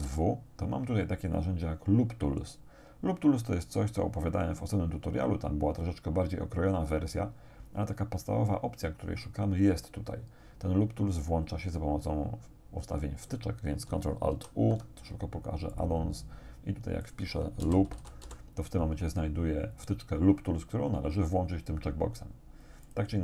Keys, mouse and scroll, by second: 0.1 w, 7.4-13.9 drag, 14.4 ctrl+alt+u, 15.8 click, 17.1 click, 17.6 l, 17.9 o, 18.3 p, 22.9 click.